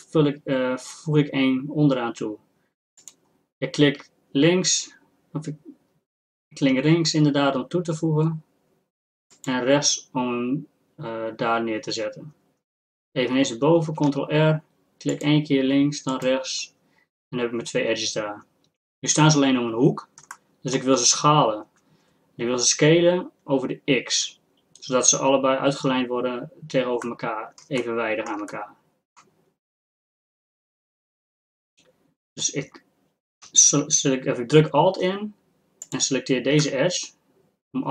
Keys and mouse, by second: 13.9 ctrl+r, 19.2-28.9 middle drag, 28.9-36.1 drag, 36.1-37.3 middle drag, 37.3 click.